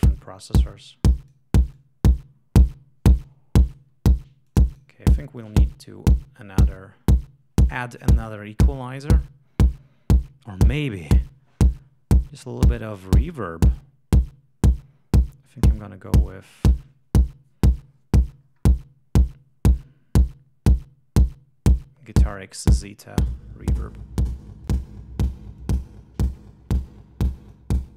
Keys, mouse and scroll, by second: 4.8 click, 5.4 right click, 6.6-7.2 scroll down 2, 8.8-9.3 scroll up 2, 15.6-16.1 scroll down 2, 18.4-18.8 scroll up 2, 22.7 click, 24.4-24.9 drag, 25.6-26.0 drag, 27.3-27.7 drag.